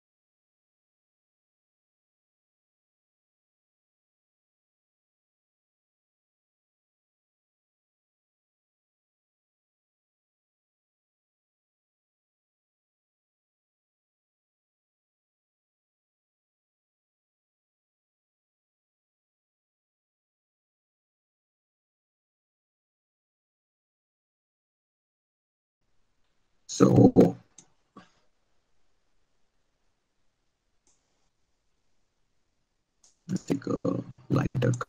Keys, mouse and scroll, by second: 2.6 click, 2.8 click, 13.6 click.